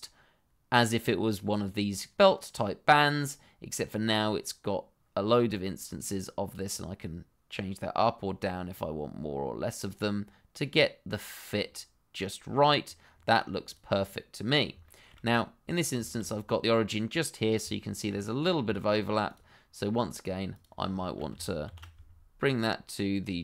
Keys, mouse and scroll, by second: 3.1 middle click, 5.6 shift+middle click, 5.9 scroll up 1, 6.6 click, 13.1-13.6 scroll down 1, 13.6 click, 14.0 middle click, 15.0 shift+middle click, 15.2-15.7 scroll up 1, 15.7 click, 16.0 shift+middle click, 16.2-17.3 scroll up 1, 17.3 scroll down 1, 17.6 shift+middle click, 18.4-18.7 scroll down 1, 18.7 shift+middle click, 19.2 click, 21.0 shift+middle click, 21.0 middle click, 21.6 shift+s.